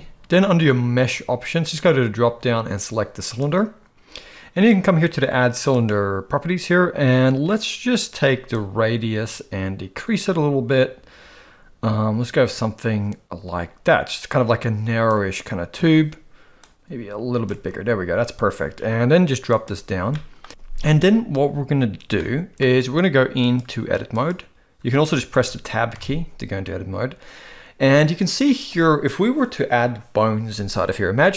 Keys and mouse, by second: 5.7 click, 8.6-15.1 drag, 16.6 click, 19.6 click, 20.1-20.4 shift+middle drag, 22.2-22.6 shift+middle drag, 23.6-24.4 drag, 25.4 Tab, 26.0 Tab.